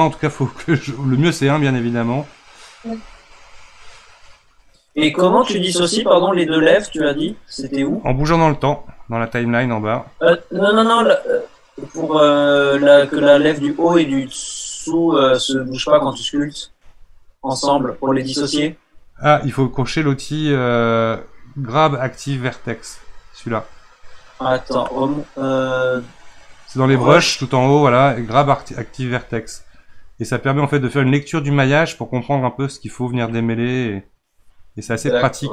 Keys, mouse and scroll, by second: 8.6-11.7 drag, 20.1-23.3 drag, 25.8-35.5 drag.